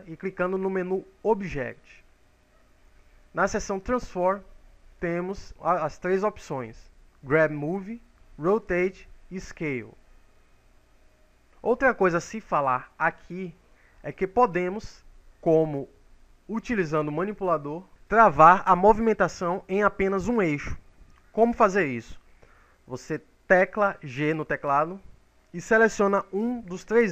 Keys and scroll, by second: 0.5 ctrl+z.